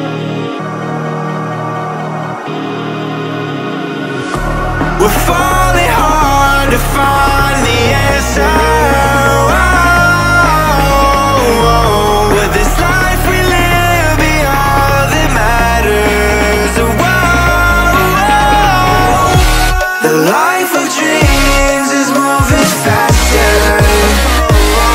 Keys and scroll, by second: 11.8 Delete.